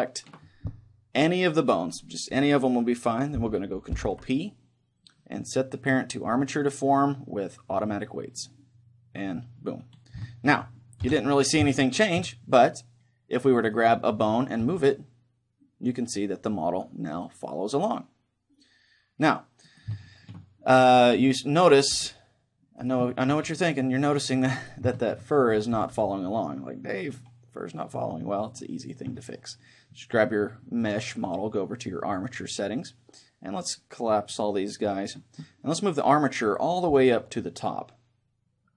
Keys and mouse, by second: 0.0-3.9 right drag, 4.5 ctrl+p, 10.2-13.7 middle drag, 11.0 KP_1, 14.6 right click, 14.6 r, 20.0 right click, 20.1-22.3 middle drag, 21.6 right click, 22.1 r, 23.1-26.8 right drag, 23.6 r, 25.0-26.8 middle drag, 25.8 r, 27.4-30.1 right drag, 32.0-38.6 drag.